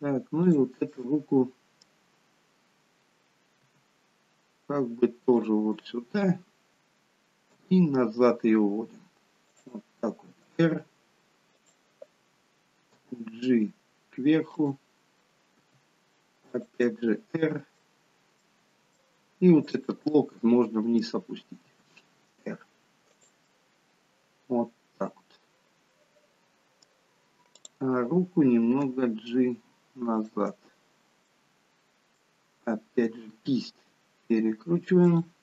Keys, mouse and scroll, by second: 0.4 click, 1.0 middle click, 3.7 r, 5.9 middle click, 7.5 g, 10.3 r, 12.9 g, 15.5 r, 16.8 middle click, 18.3 middle click, 19.6 click, 19.9 middle click, 21.5 r, 23.4 middle click, 27.6 click, 28.8 g, 30.4 middle click, 32.5 middle click, 33.1 r.